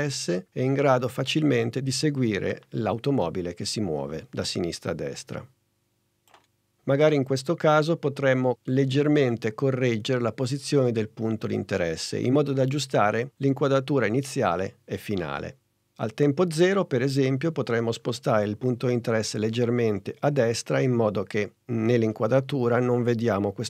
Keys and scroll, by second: 6.1 space.